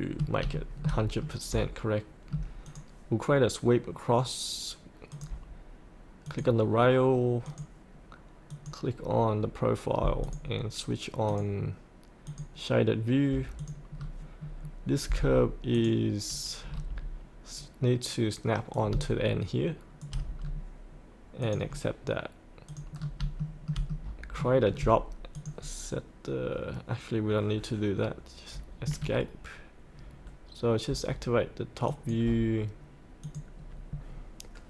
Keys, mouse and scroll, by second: 0.6 shift+middle click, 2.7-13.9 drag, 13.9 scroll up 1, 14.4 scroll down 1, 15.7 click, 16.6-18.7 scroll down 1, 18.7 click, 20.4-21.4 scroll up 1, 21.4 click, 23.0 scroll up 1, 23.4 shift+middle click, 25.3 click, 28.8 Escape, 31.8 click.